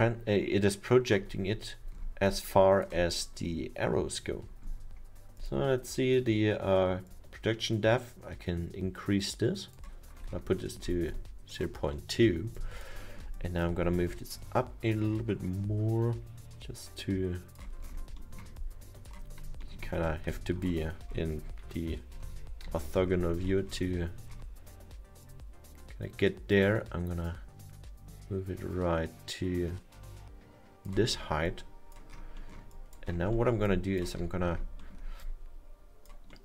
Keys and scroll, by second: 22.4 F6, 23.7 f, 34.5 r.